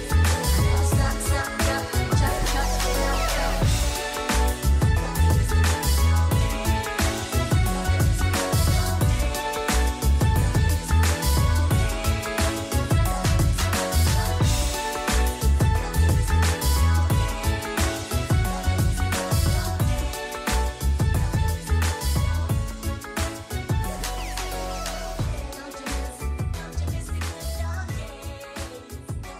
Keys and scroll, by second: 8.4-9.3 typing, 9.4 Return.